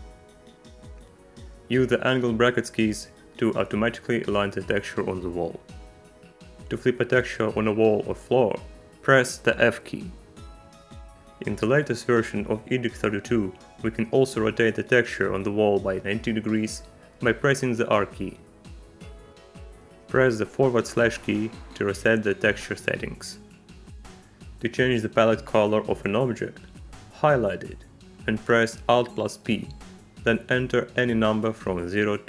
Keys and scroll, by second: 0.2 KP_8, 1.1 KP_2, 5.9 ., 6.6 ,, 9.8 f, 17.8 r, 21.9 /, 29.2 alt+p, 31.4 1, 32.0 BackSpace.